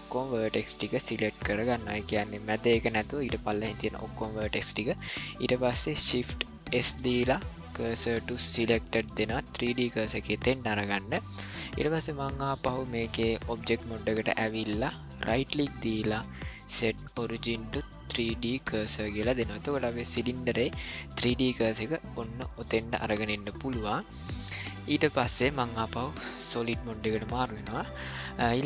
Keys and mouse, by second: 6.7 shift+s, 12.5-13.6 drag, 15.4-18.9 right drag, 21.2-22.7 middle drag, 23.7-24.7 middle drag, 25.0 shift+middle drag, 26.5 click, 27.5-28.1 ctrl+middle drag, 28.4 middle click.